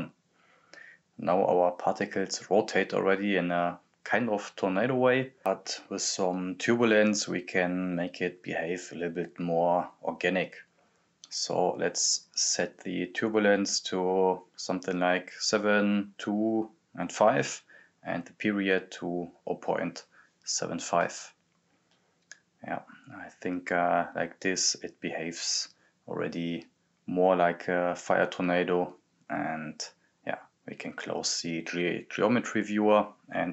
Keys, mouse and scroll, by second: 5.4 click, 8.4-10.5 drag, 11.6 click, 14.5 click, 14.5 click, 18.6-21.3 drag, 22.0-24.8 drag, 24.8 scroll down 1, 26.9 scroll down 1, 27.0 click, 29.8 scroll down 1, 31.0 right click, 31.7-32.9 typing, 33.1 click.